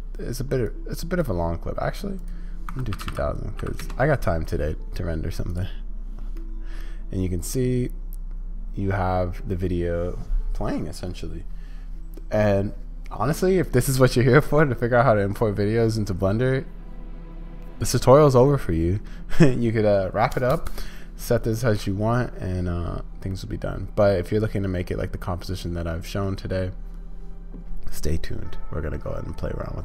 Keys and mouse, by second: 2.3-4.2 drag, 6.4-9.4 middle drag, 23.3-26.2 drag.